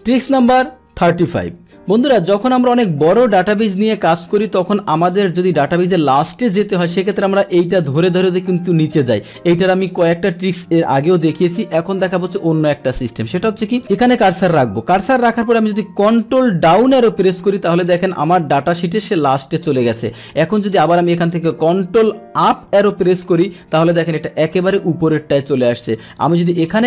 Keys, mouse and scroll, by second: 3.8 click, 5.0 click, 7.8-12.8 drag, 13.0 click, 13.7 click, 16.7 ctrl+Down, 22.6 ctrl+Up, 24.4-24.7 scroll up 1, 26.1 click.